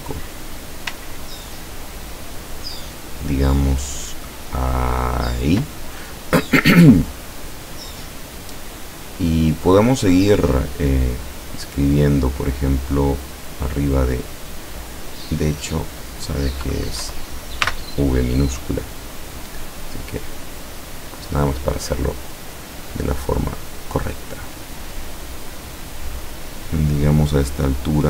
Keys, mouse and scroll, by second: 0.6-5.5 drag, 10.3 click, 15.4 click, 17.1 Delete, 17.7 v, 20.9 click, 22.3 click, 27.9 click.